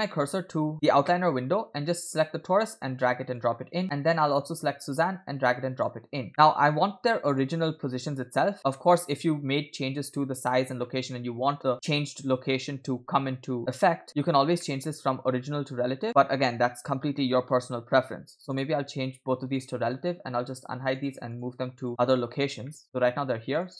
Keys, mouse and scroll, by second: 2.0 click, 2.2 click, 4.8 drag, 6.3-7.4 drag, 6.3 middle click, 8.7 middle click, 14.3 scroll up 2, 14.6 middle click, 16.1 middle click, 18.6 click, 19.6 click, 21.0 click, 21.4 click, 21.8 click, 22.2-22.7 scroll down 2, 22.7 shift+middle click, 23.5 click.